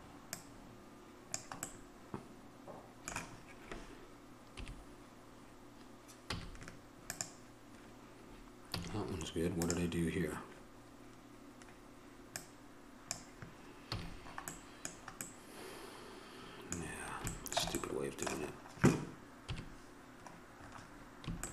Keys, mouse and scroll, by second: 1.0 click, 1.9-4.8 middle drag, 4.8 KP_3, 6.5 z, 8.9 a, 9.8-13.3 drag, 14.1 a, 14.3-16.7 middle drag, 19.7 KP_3.